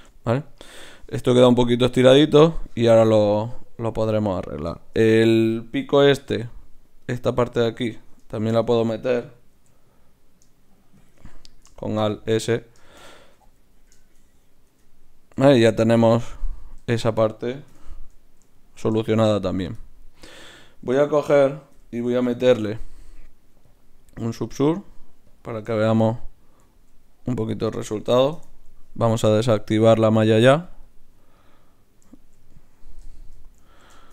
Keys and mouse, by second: 6.3 ctrl+r, 8.3 shift+Tab, 9.5 alt+s, 13.1 a, 13.3 a, 13.6 z, 14.7 Tab, 17.7 KP_Divide, 21.7 KP_Divide, 22.4 ctrl+shift+c, 25.8-34.1 middle drag, 27.5-29.3 drag.